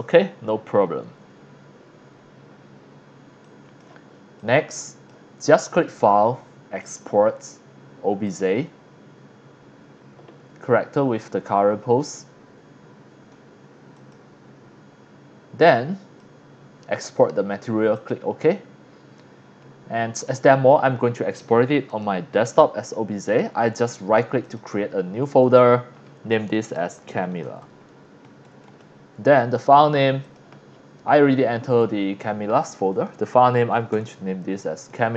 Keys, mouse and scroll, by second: 3.4-3.8 drag, 4.4-5.1 drag, 5.9 click, 6.8 click, 8.3 click, 13.9 click, 15.7 click, 17.0 click, 18.0 click, 20.2 click, 21.9 click, 24.4 click, 25.4 click, 26.5-27.8 typing, 28.2 Return, 28.6 Return, 30.2 click, 32.9 click, 33.4-35.1 typing.